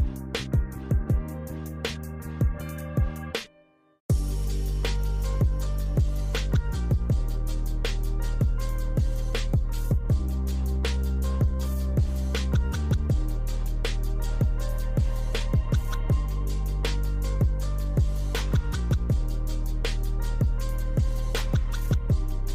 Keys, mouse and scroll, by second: 0.5 click, 1.8 click, 2.5 click, 3.1 Escape, 4.2 right click, 4.2 Escape, 4.2 click, 5.1 click, 5.8 click, 7.3 click, 10.2 click, 11.5 click, 12.5 click, 13.0 Escape, 13.4 right click, 14.5 click, 15.0 right click, 16.2 middle click, 16.5 Escape, 16.8 right click, 18.5 click, 18.5 right click, 19.1 click, 20.1 click, 21.2 click, 21.4 right click, 21.4 click, 22.4 click.